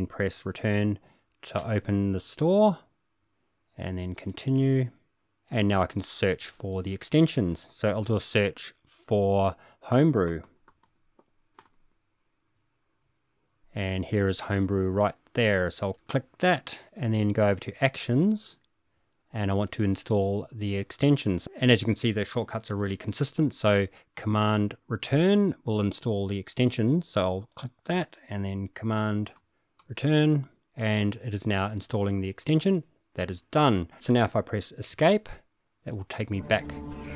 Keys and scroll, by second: 1.6 Return, 10.0-12.2 typing, 29.8 super+Return, 34.9 Escape.